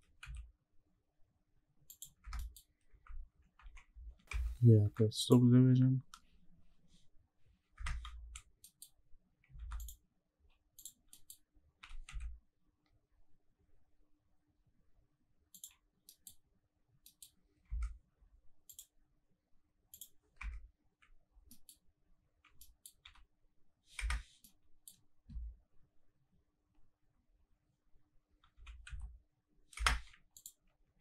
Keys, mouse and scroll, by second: 0.2 z, 1.9 click, 2.3 Tab, 2.3 middle click, 2.7 scroll up 1, 3.1 ctrl+1, 3.6 ctrl+2, 3.9 ctrl+3, 4.3 Tab, 4.8 ctrl+r, 7.8 Escape, 8.2-8.6 scroll down 3, 8.6 middle click, 9.0-9.4 scroll up 2, 9.6 ctrl+r, 10.8 click, 11.0-11.4 scroll up 3, 11.2 middle click, 11.8 g, 12.1 z, 15.5 click, 15.8 scroll up 1, 16.1 middle click, 16.4-17.1 scroll down 2, 17.1 middle click, 17.4 scroll up 1, 17.7 Tab, 18.6 click, 19.9 click, 20.3 Tab, 21.3 scroll down 1, 21.5 middle click, 21.8-22.6 scroll up 2, 22.6 middle click, 23.0 g, 24.0 Escape, 24.4 middle click, 25.6-26.9 scroll down 3, 26.9-28.5 scroll down 3, 28.5 g, 29.3 z, 29.8 Escape, 30.3 click.